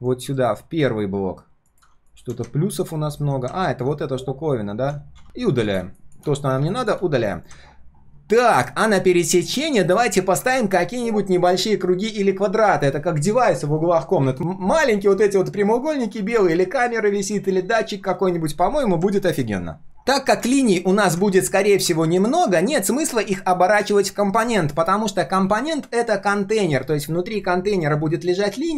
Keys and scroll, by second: 0.2 ctrl+shift+[, 5.2 ctrl+shift+g, 7.3 ctrl+shift+4.